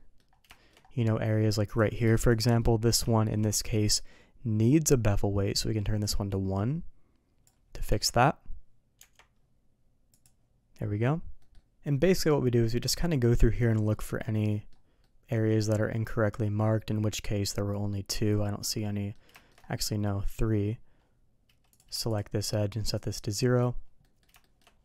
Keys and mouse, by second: 0.5 shift+middle click, 1.7 click, 2.3 shift+click, 3.1 shift+middle click, 6.0-7.5 drag, 7.9 Tab, 9.0 Tab, 10.1 click, 11.4 middle click, 13.8 middle click, 14.2 middle click, 15.0-18.4 middle drag, 18.8 middle click, 19.3 shift+middle drag, 19.9 middle drag, 21.7 click, 22.1 shift+click, 22.9 click, 24.0 middle click, 24.4 shift+middle click.